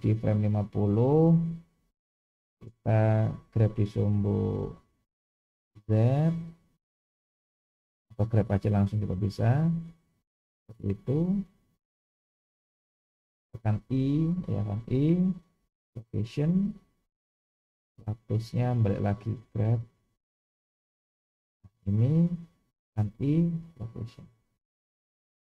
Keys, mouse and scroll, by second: 1.9-13.4 middle drag, 13.9 i.